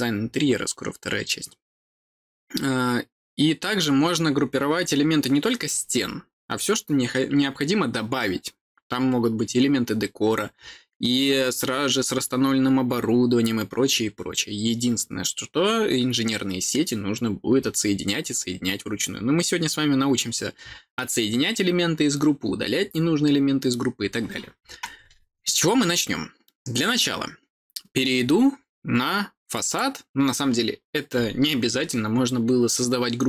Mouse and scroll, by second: 28.5 middle click, 29.5 click, 29.6 click.